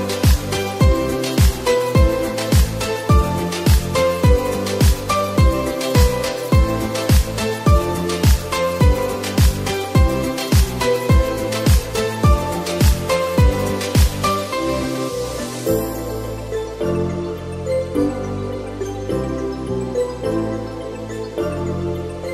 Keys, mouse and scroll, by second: 0.8-2.9 drag, 4.2 click, 5.3-8.3 drag, 8.5 click, 12.1-13.2 middle drag, 13.1-14.7 drag, 15.1-16.0 middle drag, 15.9-16.8 scroll down 6, 16.8 Tab, 17.3 middle click, 17.4 Tab, 17.6 click, 18.2 shift+a, 18.3 shift+a, 19.9-20.5 middle drag.